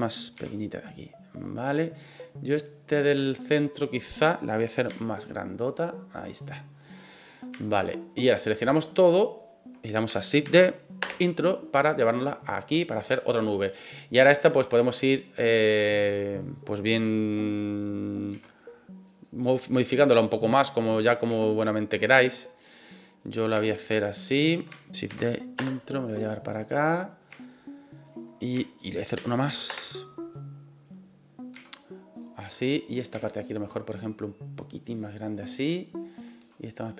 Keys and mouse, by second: 0.3 s, 2.2 click, 3.0 s, 3.4 click, 3.9 right click, 4.9 s, 6.1 click, 6.6 right click, 7.3 right click, 7.7 shift+right click, 8.0 shift+right click, 8.5 shift+right click, 9.0 shift+right click, 9.4 shift+right click, 10.4 shift+d, 11.0 Return, 11.6-12.9 drag, 13.7 right click, 14.3 right click, 14.8 s, 15.4 click, 16.3 right click, 17.6 right click, 18.3 s, 19.1 click, 20.8 right click, 21.3 s, 22.3 click, 23.2 right click, 25.1 shift+d, 25.5 Return, 26.2-27.2 drag, 27.6-28.2 shift+middle drag, 29.2 shift+d, 29.7 Return, 30.3 click, 31.5 s, 32.1 click, 32.5 right click, 32.9 right click, 33.1 s, 34.9 click, 35.2 right click, 36.2 right click, 36.4 s.